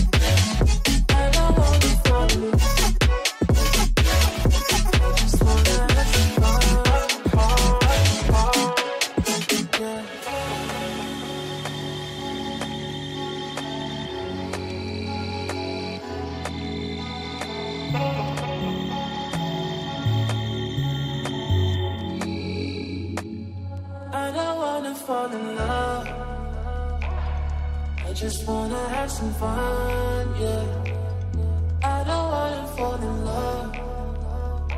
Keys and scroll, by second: 0.4 F4, 0.6 Escape, 2.8 Escape, 3.1 F3, 7.3 Caps_Lock, 7.7-13.2 typing, 9.2 Return, 12.4 Return, 14.0 ctrl+space, 14.6 F2, 18.1 Escape, 26.4 ctrl+space, 29.1 space, 33.3 ctrl+k.